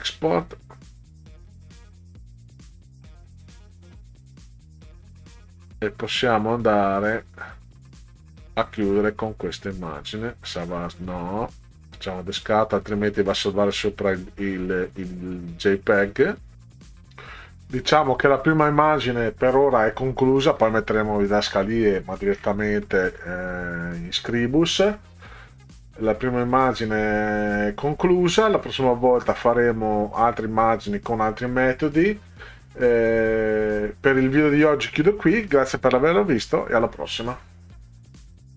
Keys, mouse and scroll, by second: 7.6 scroll down 2, 8.9 click, 11.9 click, 19.1 click, 21.7 scroll down 2.